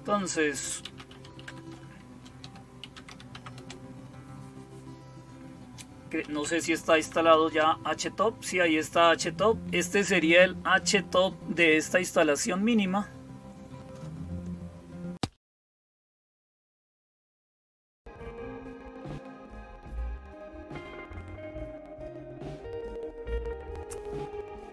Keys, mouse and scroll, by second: 0.0-24.7 typing, 19.0 click.